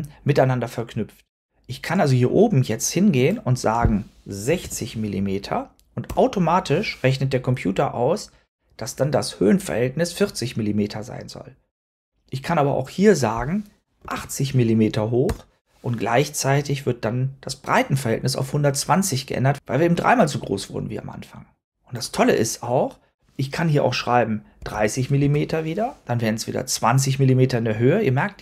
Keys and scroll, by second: 4.2-5.0 typing, 5.9 Return, 13.7-14.5 typing, 15.1 Return, 24.3-25.1 typing.